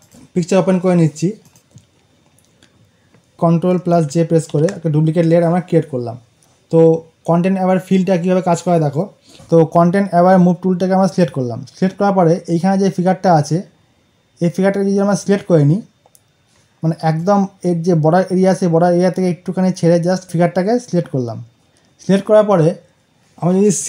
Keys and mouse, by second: 4.4 ctrl+j, 9.2 right click, 10.9 click, 12.0 click, 17.4-21.6 drag.